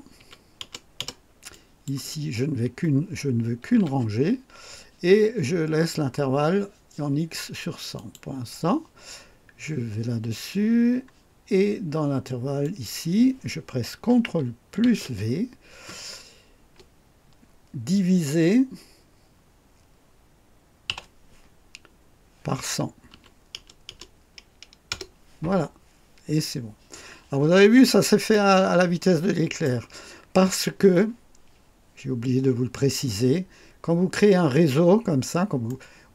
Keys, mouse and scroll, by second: 0.1 KP_1, 0.5 KP_0, 1.4 click, 3.7 KP_1, 7.9 click, 10.4-10.7 scroll down 2, 12.6 click, 14.8 ctrl+v, 20.8 /, 23.1 1, 23.5 KP_0, 24.8 KP_Enter, 27.5-27.8 scroll down 2, 28.2-29.8 right drag, 34.9-35.2 scroll down 2, 35.6 right click.